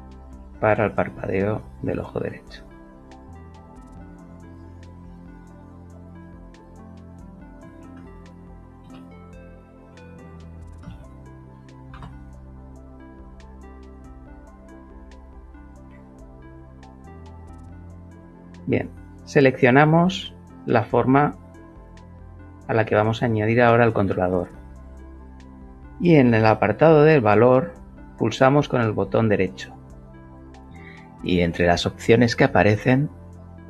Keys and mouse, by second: 1.3 click, 5.5 click, 5.7 click, 6.2 click, 7.8 shift+b, 8.8 BackSpace, 9.1 l, 10.2 k, 10.9 shift+r, 11.9 r, 13.4-15.3 shift+middle drag, 16.9 shift+click, 19.0 shift+click, 28.1-32.3 right drag, 32.4-33.6 alt+middle drag.